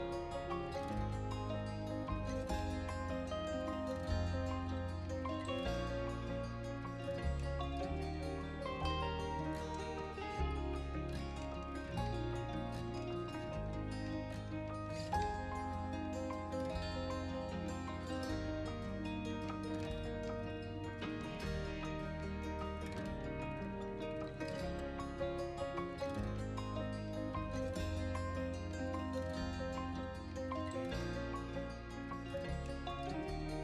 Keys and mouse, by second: 0.1 z, 1.0 middle click, 1.5 KP_1, 2.0-2.8 middle drag, 2.9-3.4 middle drag, 3.5 middle drag, 4.2 middle click, 4.8 r, 4.9 z, 5.6-6.4 middle drag, 6.5 KP_1, 6.7 KP_3, 7.4-8.4 middle drag, 8.5 r, 8.8 z, 9.5 click, 9.6 middle click, 10.6 middle click, 11.2 r, 11.3 z, 11.6 click, 11.8 middle click, 12.0 middle click, 14.6 middle click, 14.8 middle click, 15.1 click, 15.6-16.1 drag, 16.4 g, 16.6 shift+z, 17.0 click, 17.2 r, 17.3 z, 18.3-18.8 middle drag, 18.9 middle click, 19.3-21.1 typing, 20.6 click, 21.5 click, 21.7-22.4 middle drag, 22.5 s, 22.6 x, 23.6 click, 23.9 r, 24.6 z, 24.7-25.4 middle drag, 25.6 KP_1, 25.7 KP_3, 26.2-26.8 middle drag, 27.1 middle click, 27.4-28.2 middle drag, 29.4 middle click, 29.9 shift+d, 30.1 shift+z, 30.4 right click, 30.6 z, 31.5 middle click, 31.8-33.6 typing, 32.7 middle click, 33.5 click.